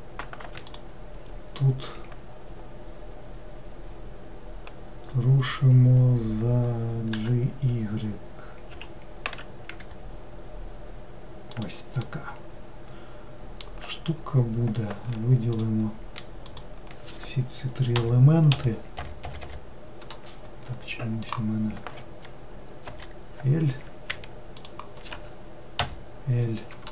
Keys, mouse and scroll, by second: 0.6 shift+click, 7.1 g, 12.0-15.0 middle drag, 15.5 shift+click, 16.5 shift+click, 18.0 l, 18.5 l, 19.0 l, 21.2 click, 22.8 l, 24.6 shift+click, 25.8 l.